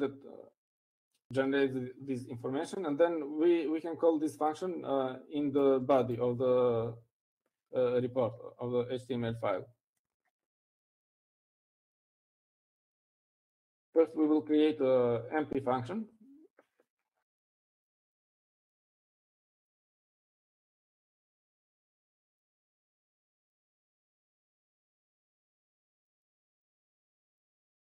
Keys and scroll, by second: 15.5 o, 22.1-27.7 typing.